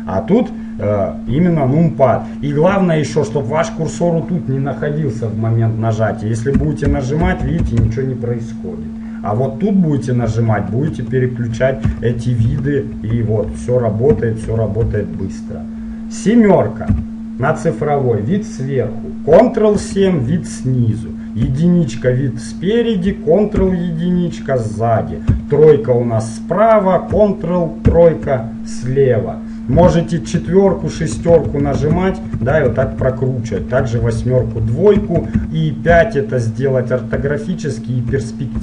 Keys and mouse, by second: 6.7-7.9 typing, 10.4 KP_1, 11.0 KP_Enter, 12.0 KP_Decimal, 12.6 KP_3, 13.2 KP_1, 13.5 KP_3, 20.0 ctrl+KP_7, 21.5 KP_1, 23.7 ctrl+KP_1, 25.4 KP_3, 27.9 ctrl+KP_3, 30.5-36.0 typing, 37.3 KP_5.